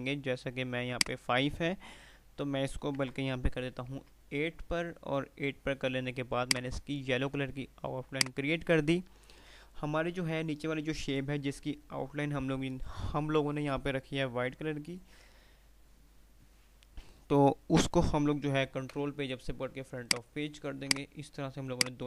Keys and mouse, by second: 0.9 click, 3.0 BackSpace, 6.6 right click, 8.3 click, 8.6 typing, 18.3 shift+Num_Lock, 18.9 shift+Page_Up, 20.2 click, 21.8 shift+click.